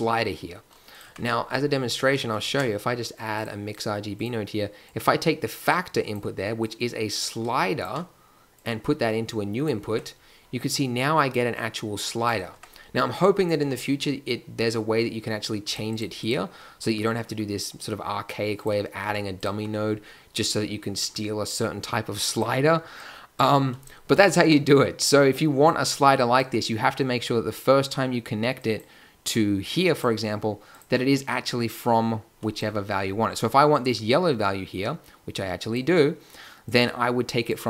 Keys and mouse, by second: 1.0 Tab, 2.3 shift+a, 9.8 Tab, 12.8 Tab, 13.5 n, 19.0 g, 24.4 Tab, 26.5 Tab, 31.9-32.6 drag.